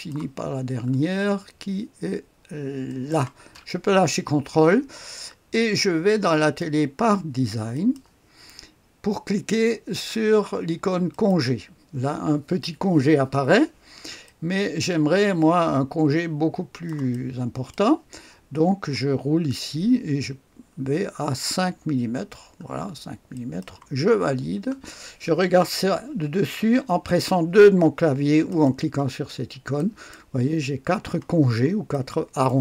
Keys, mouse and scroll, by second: 0.6-2.2 scroll up 1, 2.9 ctrl+click, 6.4 click, 7.7 click, 11.1 click, 14.2-17.1 drag, 17.1 middle click, 17.3-18.4 drag, 19.4-20.1 scroll up 1, 20.1-21.1 scroll up 1, 21.1-22.1 scroll down 1, 22.1-22.9 scroll down 1, 23.3 click, 24.3-25.8 scroll down 1, 28.5 click, 29.2-29.7 scroll down 1, 29.7 click, 31.9 click, 32.5 right click.